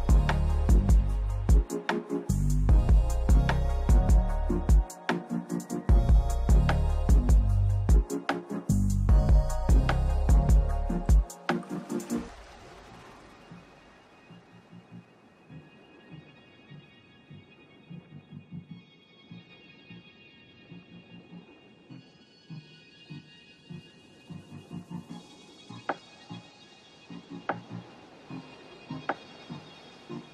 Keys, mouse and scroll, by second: 0.0-1.4 typing, 0.3 click, 2.4 click, 2.7 right click, 3.2 click, 4.9 click, 5.3 right click, 7.2 click, 8.4 click, 9.0 click, 9.5 click, 10.7 click, 11.3 right click, 11.3 middle click, 11.7 scroll up 3, 11.9 right click, 12.9 click, 13.1 scroll down 1, 13.8 middle click, 13.9 Down, 14.5 right click, 15.9 click, 16.6 click, 16.8 click, 17.1 click, 17.8 click, 18.4 scroll, 18.5 middle click, 20.1 click, 20.3-20.8 scroll, 21.9 click, 22.7 click, 23.3 click, 25.7 click, 26.0 middle click, 26.1-26.8 scroll, 26.8 click, 28.5 click, 29.7 click.